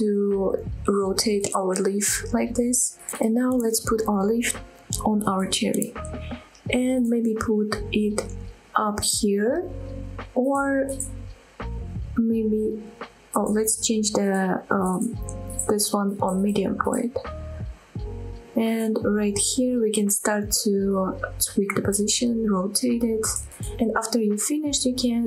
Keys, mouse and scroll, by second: 0.8 shift+s, 3.2 click, 3.6 middle click, 3.6 KP_7, 4.1 g, 6.2 click, 6.7-7.1 scroll up 2, 7.1-7.4 shift+middle drag, 7.6-8.6 middle drag, 8.8-9.2 middle drag, 9.4 g, 9.9 z, 11.6 click, 11.9-12.5 middle drag, 12.6 middle click, 13.6 s, 14.6 right click, 16.6-18.4 drag, 18.4-21.1 typing, 18.8 click, 19.0 middle click, 19.7 drag, 20.4 click, 20.5 middle click, 20.8 scroll up 1, 20.8 middle click, 21.7 click, 21.8 middle drag, 21.9 scroll up 1, 23.2 middle click, 23.4-24.2 scroll down 4, 23.6 middle drag, 23.8 shift+click, 24.1 shift+middle click, 24.2 KP_1, 24.9-25.2 shift+middle drag.